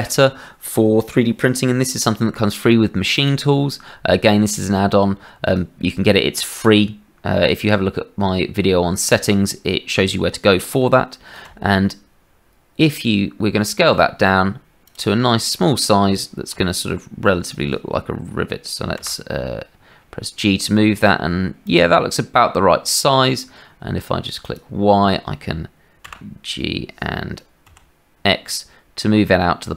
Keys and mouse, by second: 11.4 s, 16.5 s, 19.0 g, 26.0 g.